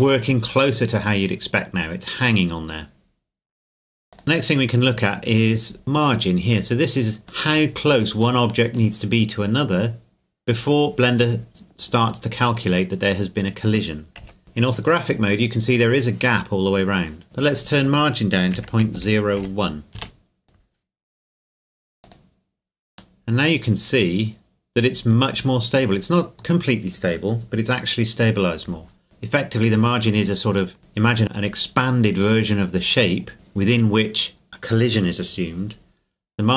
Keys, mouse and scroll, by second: 4.1 click, 4.9 middle click, 6.8 scroll up 1, 7.5 middle click, 14.2 KP_1, 15.2 scroll up 1, 17.5-18.6 scroll up 1, 18.6 KP_Decimal, 19.0 KP_0, 19.4 KP_1, 20.0 KP_Enter, 21.0-22.0 scroll down 1, 22.0 click, 23.2 middle click, 23.7 scroll down 1, 29.0 click, 30.8 middle click.